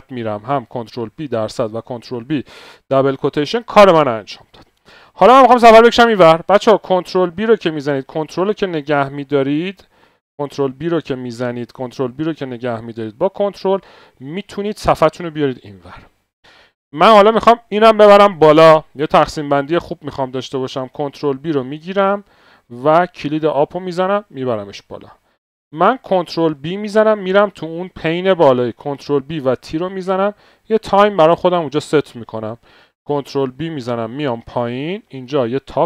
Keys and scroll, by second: 7.2 ctrl+b, 7.8 ctrl+Left, 7.9 ctrl+Left, 8.4 ctrl+Left, 10.2 ctrl+b, 10.2 ctrl+Left, 10.8 ctrl+Left, 11.0 ctrl+Left, 21.1 ctrl+b, 21.6 ctrl+b, 21.8 ctrl+b, 21.8 ctrl+Up, 22.1 ctrl+Up, 26.4 ctrl+Up, 26.7 c, 28.8 Up, 29.2 c, 33.2 ctrl+b, 33.6 Down, 34.9-35.7 typing.